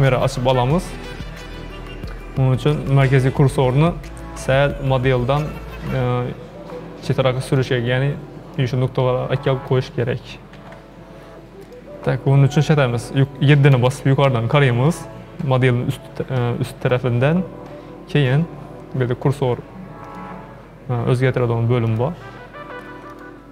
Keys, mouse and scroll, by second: 2.8-5.8 shift+middle drag, 7.6-10.5 drag, 10.5 ctrl+z, 11.7-13.7 drag, 13.7 KP_7, 20.0-23.4 drag.